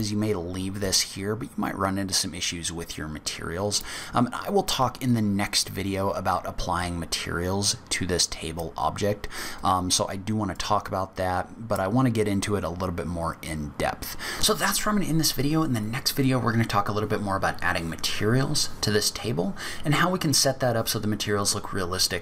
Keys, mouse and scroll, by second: 3.8 middle click.